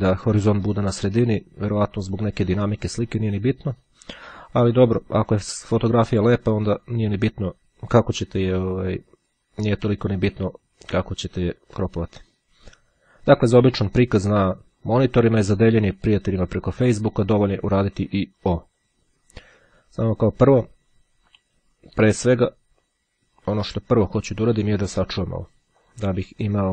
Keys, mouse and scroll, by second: 1.6-3.8 drag, 5.7-7.7 drag, 8.8-10.0 drag, 10.5-11.8 drag, 14.7-18.4 drag, 21.4 Escape, 22.4 click, 26.0 click.